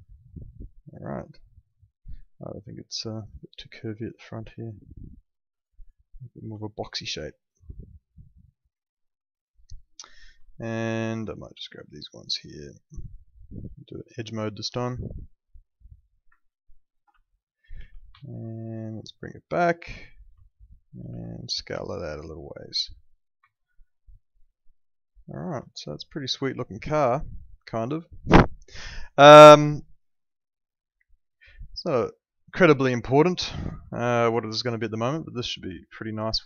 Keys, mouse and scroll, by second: 1.1 click, 3.3 shift+click, 6.6 alt+middle click, 10.4 alt+middle click, 11.2 click, 12.7 alt+middle click, 14.7 click, 16.8 ctrl+click, 17.1 alt+middle click, 17.7 w, 18.2 alt+middle click, 19.4 click, 20.4 alt+middle click, 21.1 r, 22.2 click, 23.6 alt+middle click, 25.7 alt+middle click, 29.1 alt+middle click, 34.6 alt+middle click.